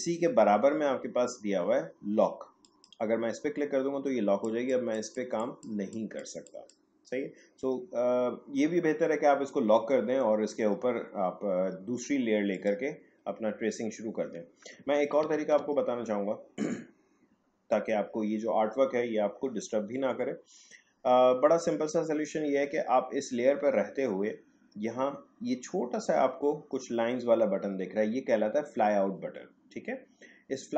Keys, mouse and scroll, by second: 2.6 click, 12.5 click, 15.2 ctrl+z.